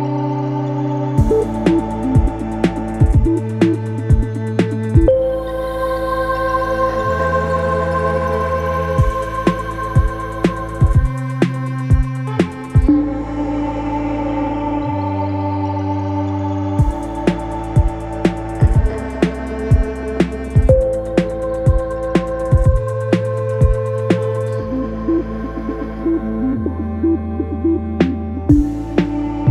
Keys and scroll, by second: 6.8 3, 7.4 Delete, 8.1 Delete, 8.6 F1, 13.9 ctrl+d, 14.1 Escape, 16.3 ctrl+d, 16.7 Escape, 17.7 F9, 18.9 Delete, 25.4 f.